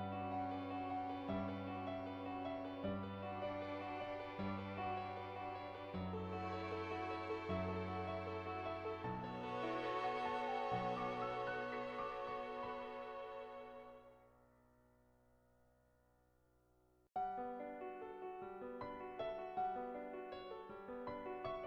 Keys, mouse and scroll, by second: 1.7 ctrl+z, 2.2 click, 3.9-6.2 drag, 7.1 click, 8.2 click, 8.5 ctrl+z, 8.6 ctrl+z, 9.0-11.8 drag, 13.3 shift+middle click, 13.6 middle click, 13.9 shift+middle click, 15.5 click, 16.2 click, 20.5-21.6 drag.